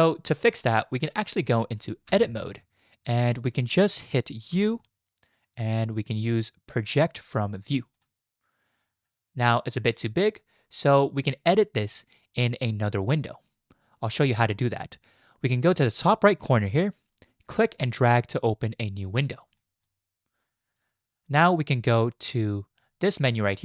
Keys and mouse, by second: 2.1 Tab, 4.5 u, 17.5-20.0 drag.